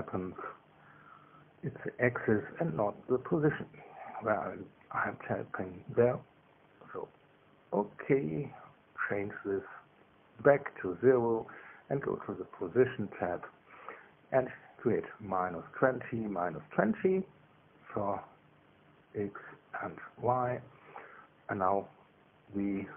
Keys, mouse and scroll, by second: 3.6 KP_Subtract, 4.5 KP_2, 4.9 KP_0, 6.7 BackSpace, 6.9 BackSpace, 8.1 BackSpace, 8.7 KP_0, 9.9 click, 10.8 KP_0, 11.1 KP_Enter, 12.6 click, 13.1-14.1 scroll down 1, 14.1 click, 15.0 KP_Subtract, 15.3 KP_2, 15.6 KP_0, 16.0 Tab, 18.3 KP_Subtract, 18.7 KP_2, 18.9 KP_0, 19.5 KP_Enter, 20.7-22.6 drag, 22.6-22.9 middle drag.